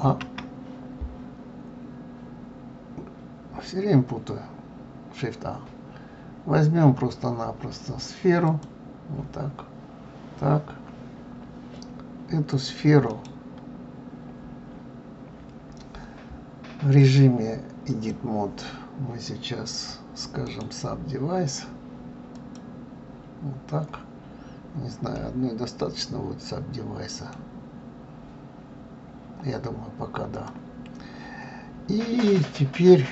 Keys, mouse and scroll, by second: 11.0-11.6 scroll up 2, 12.5 click, 13.1 right click, 17.0-20.0 drag, 20.4 right click, 24.6-24.9 scroll up 2, 25.2-27.6 middle drag, 27.6-28.2 scroll down 2, 28.3 scroll up 1, 30.3 click.